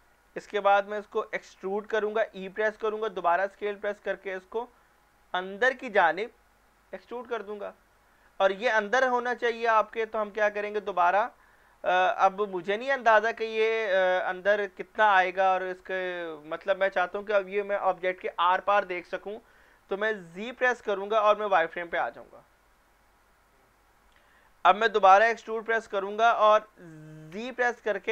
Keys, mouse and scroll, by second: 1.6 e, 3.2 s, 6.2 click, 9.7 scroll down 1, 10.2 middle click, 11.1 scroll down 1, 11.6 shift+middle click, 12.3-14.1 scroll up 1, 20.3 z, 21.9 click, 25.4 e, 27.3 z.